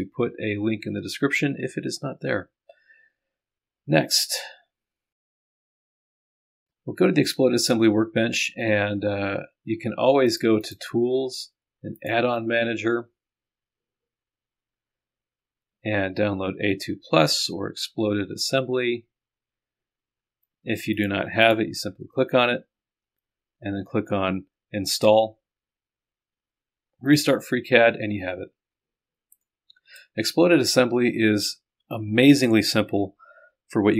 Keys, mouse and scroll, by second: 4.4 click, 5.6 click, 5.8 click, 6.0 right click, 6.1 middle click, 10.3 click, 12.0 click, 16.8-18.2 scroll up 1, 18.2-19.2 scroll up 1, 19.2-19.5 scroll up 1, 20.0-21.0 scroll up 1, 21.0-22.1 drag, 27.1 click, 29.3 click, 29.4-30.5 middle drag, 32.7-33.6 scroll up 2.